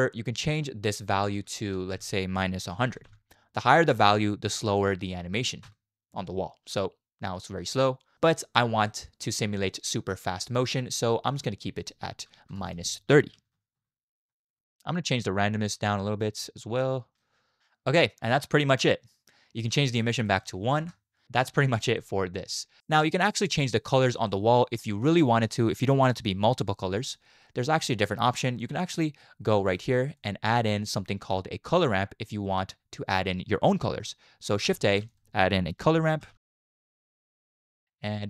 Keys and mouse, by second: 0.6-5.7 drag, 1.9 BackSpace, 3.0 0, 6.6 space, 8.2 space, 8.9 middle click, 9.3-9.7 drag, 9.3-9.7 right drag, 10.4 click, 10.4 right click, 11.3-13.8 drag, 12.5 BackSpace, 14.5 space, 15.2 shift+click, 15.9-17.2 shift+drag, 18.2 middle click, 19.7 middle click, 20.2 click, 22.0 click, 22.0 middle click, 22.0 right click, 22.8 middle click, 23.2-23.6 middle drag, 24.3 middle click, 25.2 shift+drag, 25.4 shift+middle click, 25.8 middle click, 27.8-28.3 drag, 28.7 g, 30.1 click, 30.6 middle click, 34.8 shift+a, 37.9 middle click.